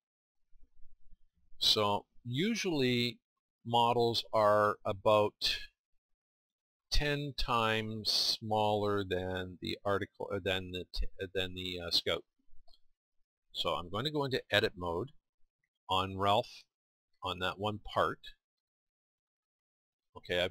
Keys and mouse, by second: 2.2 middle click, 5.0 middle click, 17.0-20.5 drag.